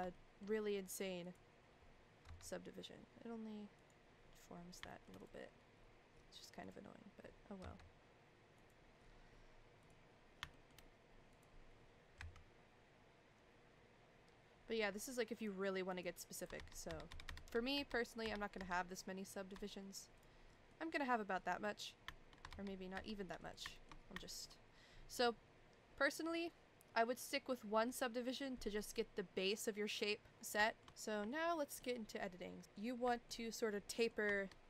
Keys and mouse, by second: 0.1 shift+middle click, 2.2 g, 4.9 shift+middle click, 5.2 click, 7.6 g, 9.8 click, 10.5 shift+middle click, 11.3 click, 12.1 g, 16.5 ctrl+z, 16.9 ctrl+z, 17.1 ctrl+z, 17.2 ctrl+z, 17.4 ctrl+z, 17.7 ctrl+z, 18.2 ctrl+z, 18.6 ctrl+z, 20.7 middle click, 21.5 middle click, 22.5 ctrl+z, 22.9 ctrl+z, 23.4 click, 23.7 shift+middle click, 24.2 shift+middle click, 30.6 shift+middle click, 31.3 shift+middle click, 32.6 ctrl+z, 32.6 middle click, 33.1 shift+middle click, 33.9 middle click.